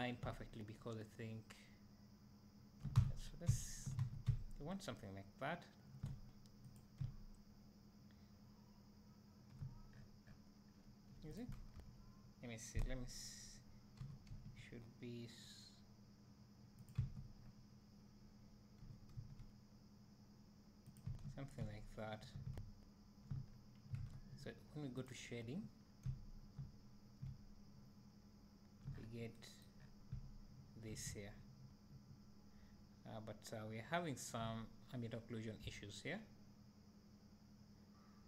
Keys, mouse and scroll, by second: 3.0 Tab, 3.2 scroll down 2, 4.0 alt+a, 6.8 click, 10.0 scroll up 1, 10.7 scroll down 1, 11.4 click, 11.8 KP_1, 14.0 g, 17.0 Tab, 17.4-18.3 scroll up 1, 18.8 g, 21.1 Tab, 21.4 scroll down 2, 21.6 `, 23.5-24.0 scroll down 2, 24.0 alt+a, 25.2-26.3 drag, 26.7 `, 29.0-29.4 scroll down 1, 29.8 scroll up 1, 31.5 `.